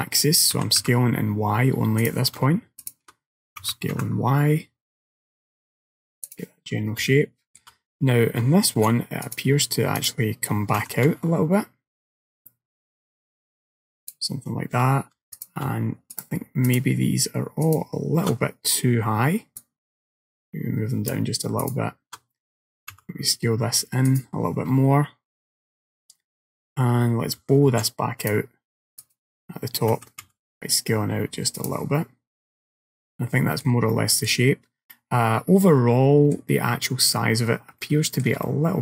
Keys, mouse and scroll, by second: 0.6 s, 2.9 alt+click, 3.7 s, 7.1 middle click, 8.8 ctrl+r, 10.9 s, 15.4 alt+click, 16.2 alt+shift+click, 16.7 alt+shift+click, 17.7 alt+click, 19.6 click, 21.7 alt+click, 22.7 s, 27.8 ctrl+r, 30.0 s, 32.4 middle click, 34.0 shift+middle click, 35.0 middle click, 37.5-37.8 scroll down 1, 37.9 shift+middle click, 38.5 middle click.